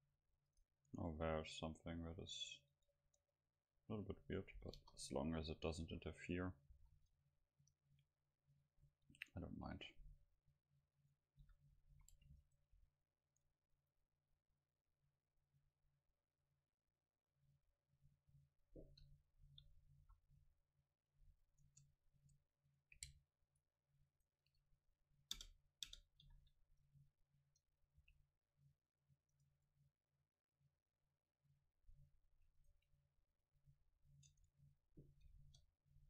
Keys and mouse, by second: 0.6-4.8 drag, 3.1 Tab, 4.8 KP_0, 5.9 a, 6.7 ctrl+s, 11.0 Tab, 11.4 a, 11.7 a, 11.9 a, 12.4-14.9 right drag, 13.8-15.1 drag, 16.9 Tab, 18.0 Tab, 19.4 KP_Decimal, 20.0 a, 20.9-22.8 middle drag, 21.7 Tab, 22.2 Tab, 23.5-25.8 right drag, 25.4 ctrl+KP_Add, 26.3 ctrl+KP_Subtract, 28.0 c, 29.5 right click, 29.8 click, 30.4 click, 32.6-34.5 right drag, 33.6-34.9 drag, 34.3 Tab, 35.4 KP_0.